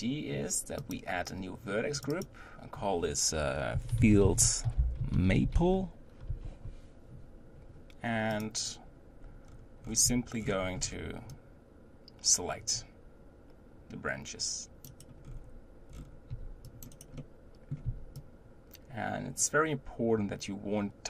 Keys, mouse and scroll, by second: 0.8 click, 2.2 click, 9.5-9.8 scroll down 3, 9.8 scroll up 5, 10.0 c, 15.2-15.9 scroll up 4, 15.9-16.3 scroll down 6, 16.3 c, 17.2 middle click, 17.8 c.